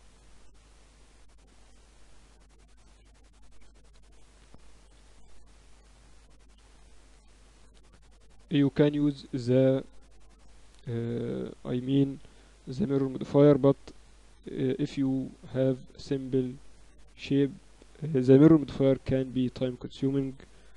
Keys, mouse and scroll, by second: 1.3 KP_1, 1.8 z, 2.6 z, 3.8 a, 4.8 b, 6.4 b, 8.0-10.2 drag, 11.4 a, 12.0 b, 13.6 b, 15.8-17.6 drag, 17.8 a, 18.5 b, 20.4 b.